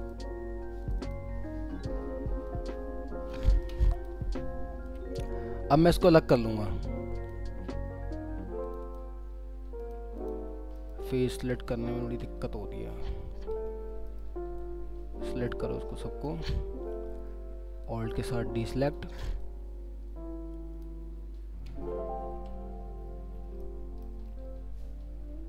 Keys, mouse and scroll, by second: 1.0 double click, 1.8-2.2 scroll down 1, 4.4-4.9 scroll up 1, 8.6 ctrl+click, 9.3 scroll down 1, 10.2 double click, 10.5 scroll down 1, 10.7 middle click, 11.3 alt+w, 12.0 alt+w, 13.0 scroll up 1, 13.6-14.1 scroll down 1, 14.1 middle click, 16.6-17.3 scroll up 1, 17.8 alt+click, 19.4 alt+click, 21.4 alt+scroll up 1, 21.7 alt+w, 22.4 alt+w, 23.0 alt+scroll, 23.0-23.6 alt+scroll down 2, 23.6 alt+middle click, 24.3-24.8 alt+scroll up 2.